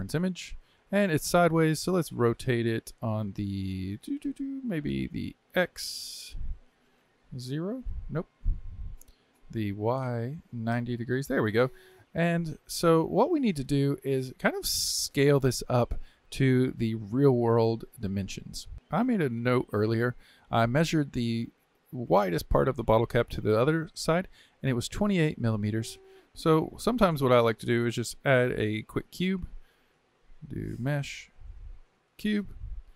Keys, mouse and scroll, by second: 6.7-8.8 drag, 8.8 ctrl+z, 9.7-12.7 drag, 12.7 scroll up 2, 13.3-14.2 shift+middle drag, 14.2 scroll up 2, 14.6-17.6 shift+middle drag, 26.3 click, 29.3 shift+a.